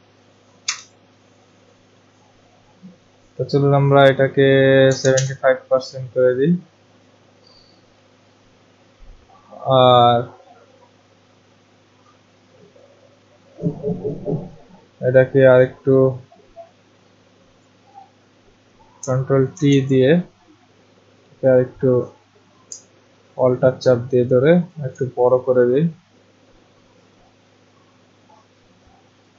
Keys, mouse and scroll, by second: 0.7 0, 4.6-5.6 typing, 12.8 click, 15.6 click, 17.6 click, 19.5 ctrl+t, 24.7 alt+click, 29.2 click.